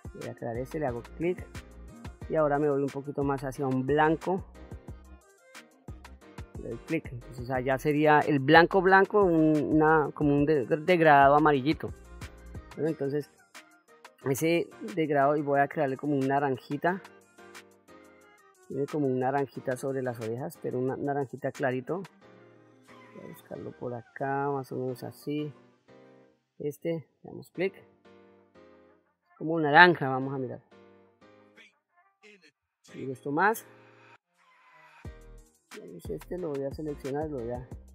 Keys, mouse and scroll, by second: 0.1 click, 2.2-5.1 drag, 6.1 click, 15.2-24.5 drag, 26.6 click, 30.0-32.0 drag, 32.6 click, 36.0 click, 37.1 click.